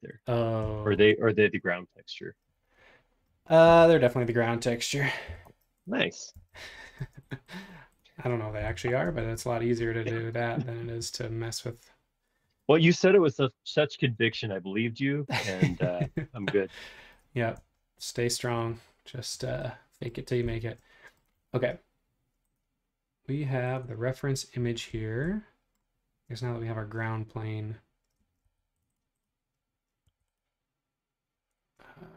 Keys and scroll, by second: 0.9 shift+g, 5.2 b, 6.0 Escape, 6.4 space, 6.5 Escape, 7.0 space, 7.7 Escape, 8.6 b, 9.1 space, 9.1 Escape, 28.2 space, 28.5 ⟲, 30.0 ⟲.